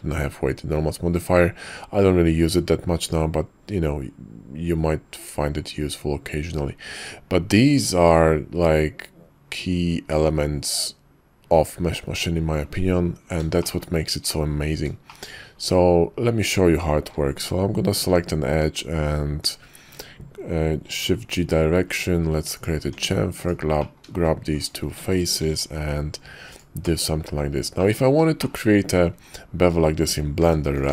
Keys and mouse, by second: 13.6 shift+middle click, 14.3 middle click, 15.0 shift+click, 17.9 shift+g, 20.8 ctrl+b, 22.8 Tab, 23.4 click, 23.8 click, 24.6 shift+click, 25.4 ctrl+b, 26.9 click, 27.8 click, 29.1 Tab, 30.4 shift+d.